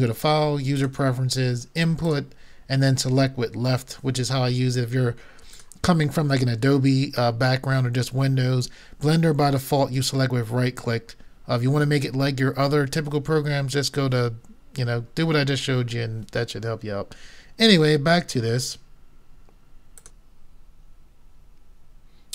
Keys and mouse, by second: 20.0-21.8 drag.